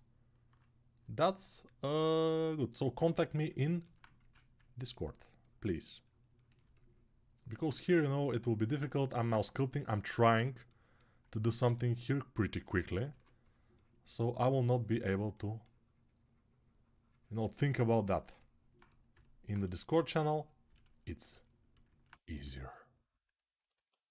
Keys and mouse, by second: 4.0 1, 6.9-8.9 alt+right drag, 9.0-11.2 alt+shift+right drag, 11.4 g, 12.9 2, 19.4-23.6 shift+right drag, 22.1 g, 23.6-24.1 alt+drag.